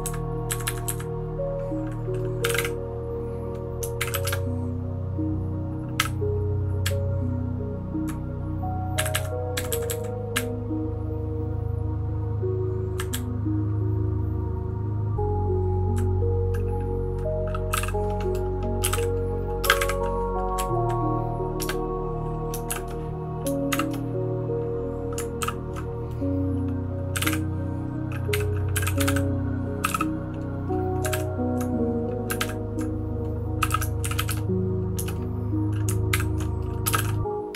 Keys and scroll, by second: 0.0 Down, 0.5 Up, 0.8 Up, 2.3-4.8 typing, 6.0 u, 6.8 Down, 7.3-8.0 Down, 8.9 Up, 9.1 Up, 9.5 Down, 9.8 Down, 10.3 Up, 10.8-12.9 Up, 13.1 Down, 13.6-15.9 Down, 17.4-19.8 typing, 20.6 Down, 22.7 Return, 22.7 shift+b, 23.7 shift+g, 25.4 ctrl+h, 27.0-34.8 typing, 36.1 ctrl+l, 36.7-37.5 typing.